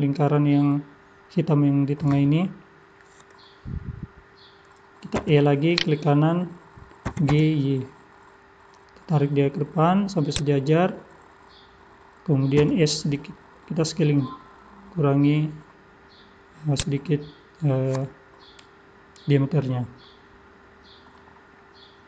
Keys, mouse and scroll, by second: 5.1 e, 7.1 g, 12.6 s, 17.2 scroll down 2, 20.0 middle click, 20.0 scroll down 1, 21.4 scroll down 2.